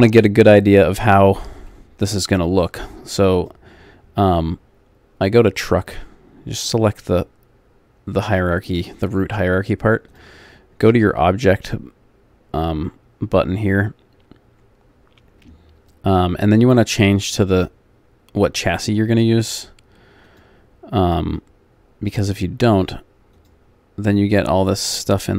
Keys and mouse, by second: 3.4 right click, 4.4-10.1 middle drag, 10.1-25.3 drag.